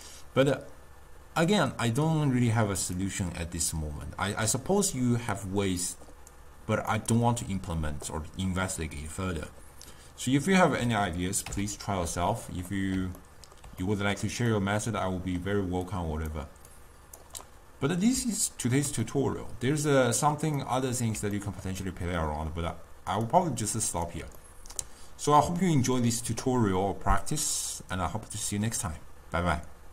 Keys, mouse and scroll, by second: 1.9 click, 3.9-11.5 drag, 11.5 x, 23.4-29.9 drag.